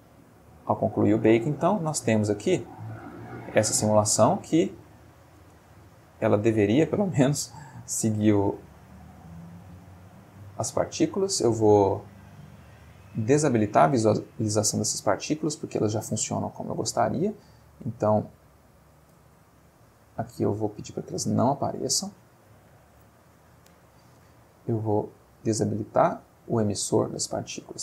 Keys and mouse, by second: 1.8-3.1 drag, 3.0 space, 5.4 space, 7.9 click, 9.8 click, 15.5 click, 16.4 middle click, 17.5 middle click, 18.6 middle click, 20.0 click, 20.6 click, 25.2 click.